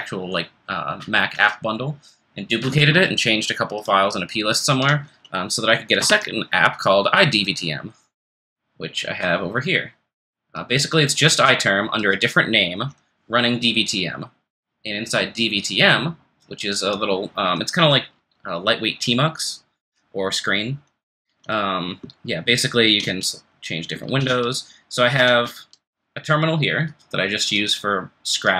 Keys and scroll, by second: 6.0 super+Return, 22.8 ctrl+f, 23.0 3, 24.0 ctrl+f, 25.1 ctrl+f, 25.1 2, 25.6 1.